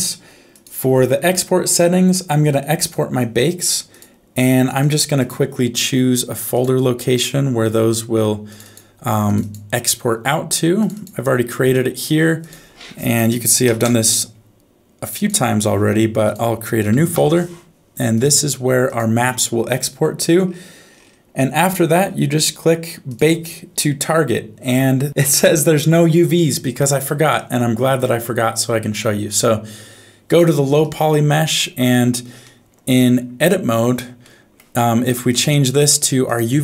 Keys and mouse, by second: 0.5 click, 2.8 click, 4.1 click, 5.2 click, 23.1-27.3 drag, 31.4 Tab, 32.4 middle click, 32.9 alt+z, 34.3 middle click, 35.3-36.3 drag.